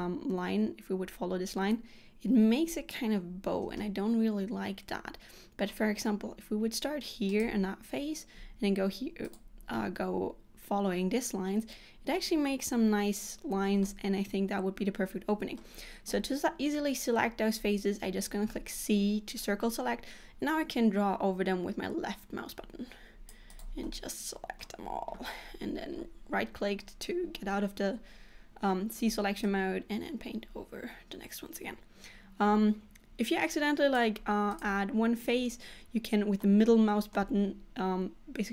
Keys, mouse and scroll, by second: 3.9 middle click, 7.4 click, 8.5 s, 13.9 middle click, 18.5 c, 23.9 middle click, 29.1 c.